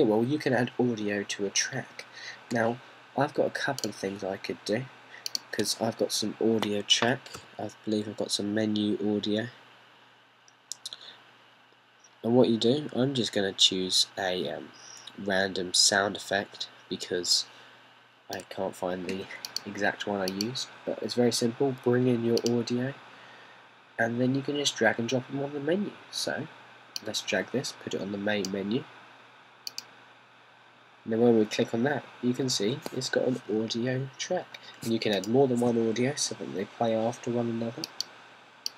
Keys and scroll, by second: 8.5 m.